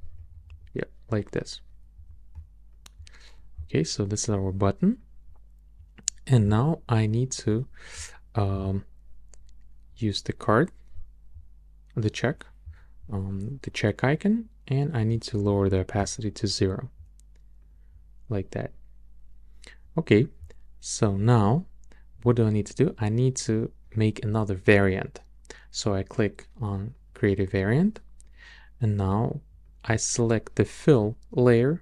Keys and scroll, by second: 0.7 Up, 1.9 Up.